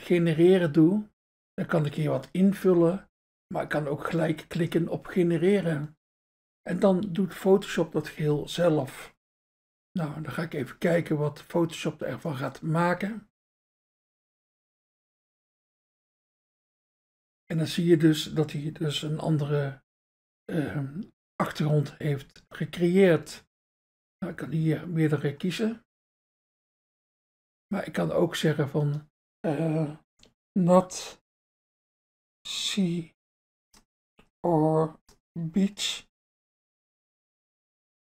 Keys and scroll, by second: 1.1 BackSpace, 4.4 BackSpace, 24.2 BackSpace, 30.4-37.5 typing.